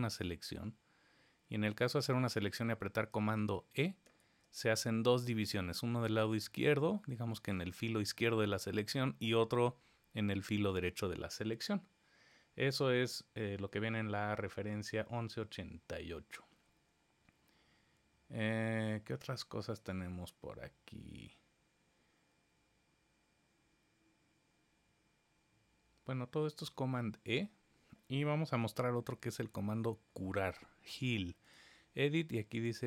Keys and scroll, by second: 4.0 super+e.